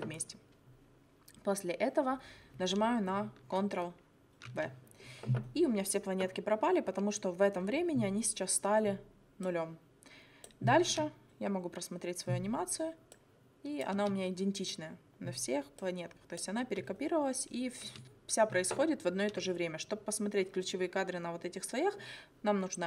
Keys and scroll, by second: 4.5 ctrl+v, 10.9 space, 13.9 space, 16.6 space.